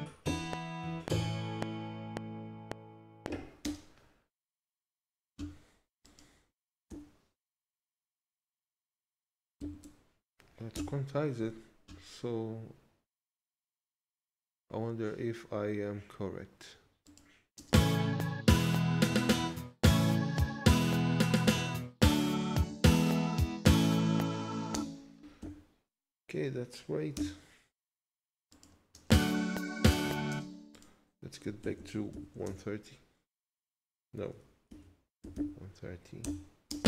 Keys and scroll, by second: 3.6 space, 6.9 q, 9.6 Down, 10.7 Return, 17.6 space, 24.7 space, 25.4 q, 27.2 Return, 28.9 space, 30.3 space, 32.4 Return, 34.7-36.7 typing, 36.2 Return.